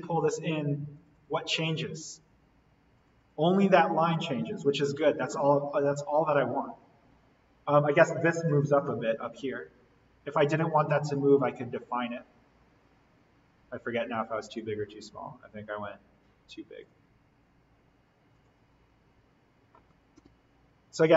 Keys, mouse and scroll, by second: 10.3 click, 14.4 click, 16.9 click, 20.2 alt+l.